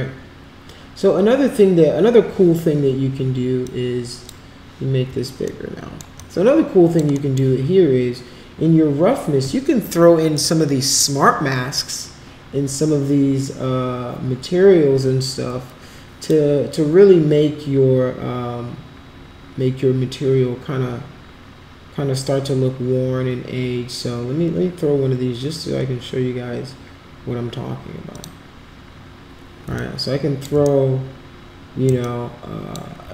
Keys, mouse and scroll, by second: 3.7-4.3 drag, 5.6 alt+middle click, 6.2 alt+click, 7.1 alt+middle click, 10.3 click, 16.2 click, 28.1 click, 29.8 alt+click, 30.6-31.9 shift+right drag, 32.0 alt+click.